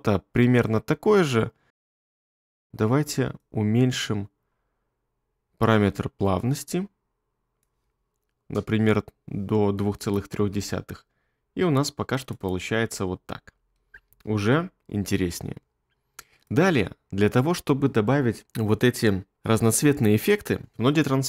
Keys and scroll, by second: 10.6 space, 14.1 space.